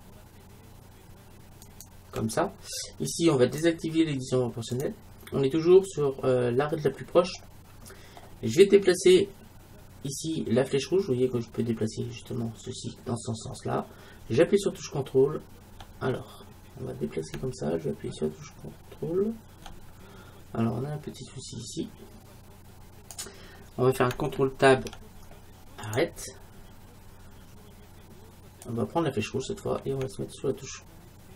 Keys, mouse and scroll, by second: 1.7-3.6 right drag, 3.6-5.5 drag, 7.4-9.4 middle drag, 10.2-14.6 drag, 24.8 ctrl+Tab, 28.7-30.4 drag.